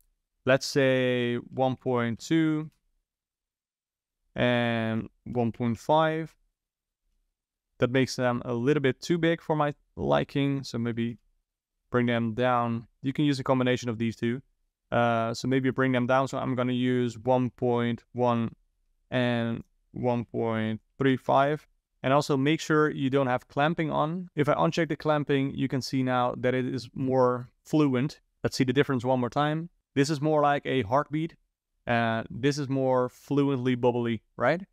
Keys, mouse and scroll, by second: 4.2 click, 4.9-7.9 drag, 10.5-13.5 drag, 15.6-18.8 drag, 19.5-21.8 drag, 21.8 ctrl+z, 24.9 click, 29.0 click, 31.9 click.